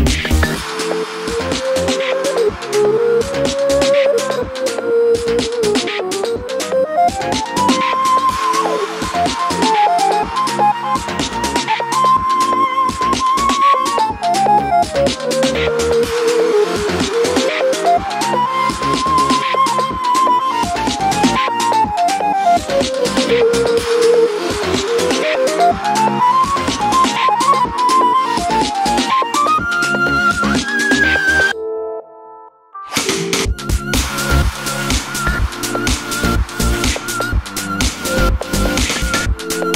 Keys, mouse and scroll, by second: 0.0-1.0 typing, 0.8 click, 2.1 click, 2.2 e, 3.4 click, 3.5 s, 4.5 click, 4.9 e, 5.2 click, 5.2 s, 5.9 click, 5.9 e, 6.8 click, 6.9-12.8 middle drag, 7.2 scroll down 1, 7.3 Tab, 7.8 z, 8.6 scroll down 1, 12.8 click, 13.1 click, 13.8 KP_3, 14.2-23.9 shift+middle drag, 14.4 scroll up 1, 15.4 shift+a, 23.9 click, 24.1 Tab, 29.1 1, 30.5 click, 31.1 g, 34.5 click, 35.4 Tab, 36.6-39.7 middle drag, 37.8 a.